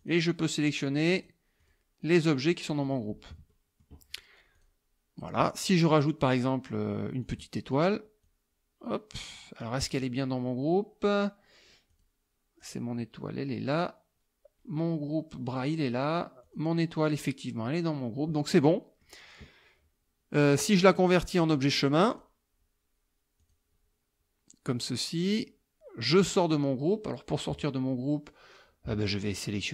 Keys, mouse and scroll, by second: 0.0 click, 0.7 click, 1.2 click, 1.7 click, 2.1 click, 2.5 click, 2.9 click, 3.5 click, 4.6 click, 7.3 click, 8.3-9.8 drag, 11.9 click, 12.6 click, 15.5 click, 16.5 click, 18.7 click, 22.1 click, 23.4 click, 25.4 click, 26.2 click.